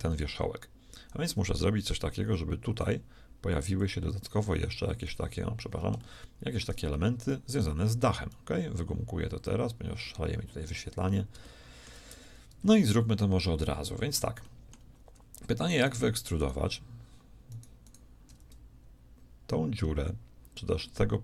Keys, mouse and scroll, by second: 1.8 d, 2.2-5.0 d, 2.8-6.0 drag, 3.9 d, 5.4 d, 8.1 d, 8.3-9.6 drag, 9.6 right click, 10.6 d, 11.5 shift+middle click, 12.1 Tab, 13.1-16.1 middle drag, 15.7-19.8 right drag.